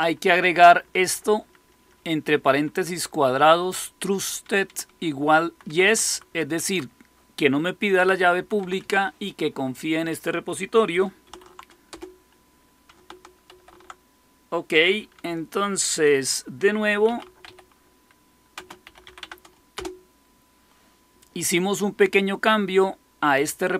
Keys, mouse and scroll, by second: 0.5-6.5 typing, 1.6 Left, 1.7 Left, 1.9 Left, 2.1 Left, 5.6 Right, 7.7-8.4 typing, 8.5 Right, 8.7 Right, 11.0-13.9 typing, 11.8 Return, 16.8-19.5 typing, 19.7 Return.